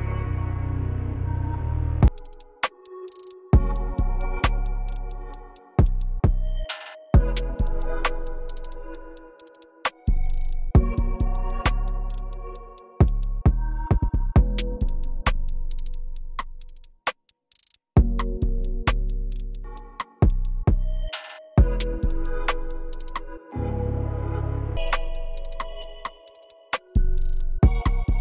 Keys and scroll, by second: 2.0 p, 4.2 t, 24.1 p.